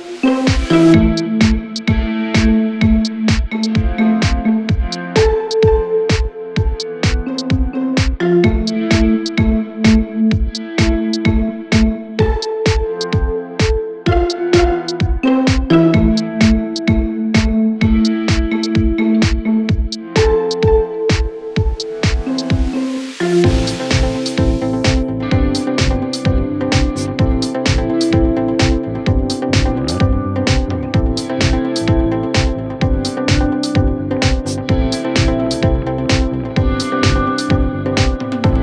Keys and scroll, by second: 26.1 Delete.